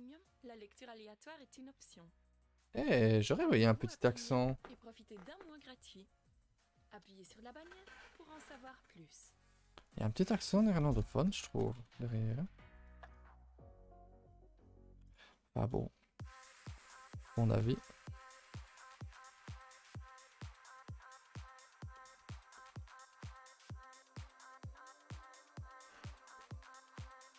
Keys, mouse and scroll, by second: 0.4 Tab, 0.5 middle click, 0.8 scroll up 1, 1.0 2, 2.7 click, 3.7-16.9 drag, 16.9 middle click, 17.2 click, 17.6 click, 19.1 click, 19.5 click, 19.8 click, 20.5 click, 22.0 middle click, 22.2 middle click, 22.8-23.3 scroll up 2, 23.3 click, 23.7 click, 24.2 click, 24.8 click, 25.3 click, 25.6 click, 26.0 click, 26.2 click, 26.8 click, 27.1 click.